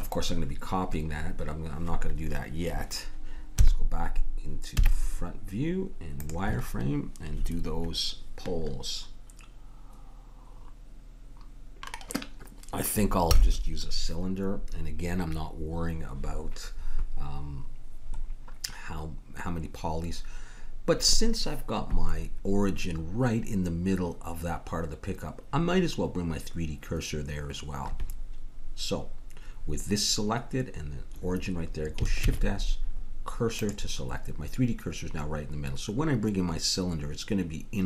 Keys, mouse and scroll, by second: 3.6 KP_1, 4.7 z, 32.2 shift+s.